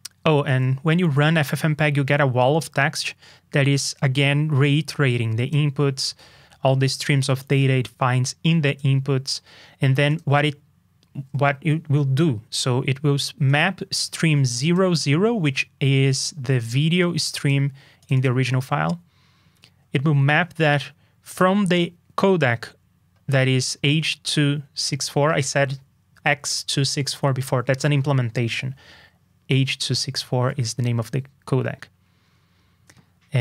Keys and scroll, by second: 1.4 super+Up.